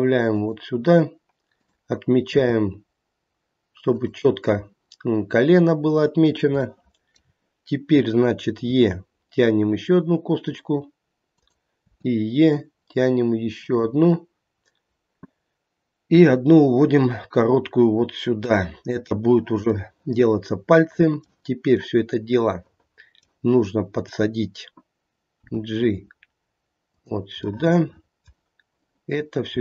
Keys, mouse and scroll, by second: 1.5 click, 2.3 g, 6.5 shift+middle click, 7.1 shift+middle click, 8.7 e, 11.8 e, 16.2 e, 19.8 middle click, 21.1 middle click, 23.1 middle click, 23.9 click, 25.3 g, 27.4 middle click, 27.4 scroll down 1, 28.1 middle click, 28.7 click, 29.4 g.